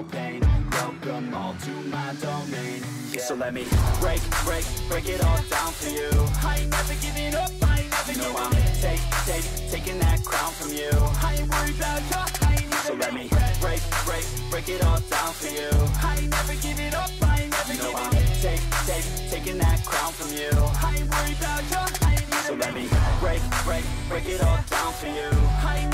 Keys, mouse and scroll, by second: 0.3 shift+click, 5.5 double click.